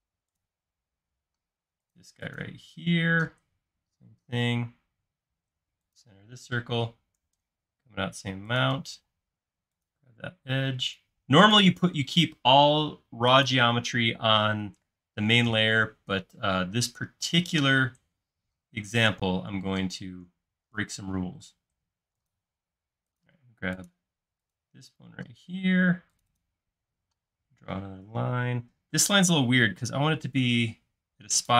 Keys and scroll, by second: 3.4 l, 9.1 shift+space, 17.5 i, 28.3 l.